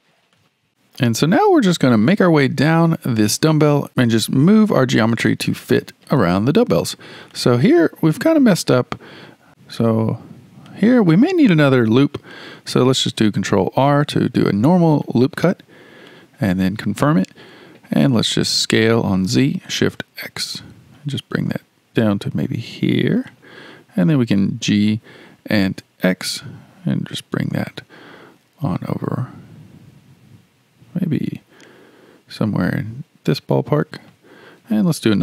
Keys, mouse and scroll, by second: 0.7-1.4 shift+middle drag, 1.4-1.9 scroll down 1, 1.9-3.9 shift+middle drag, 3.9-4.3 scroll down 1, 4.9-6.9 shift+middle drag, 6.9-7.3 scroll up 1, 7.3-9.5 shift+middle drag, 10.7-13.6 shift+middle drag, 13.6 ctrl+r, 18.6 s, 24.6 g.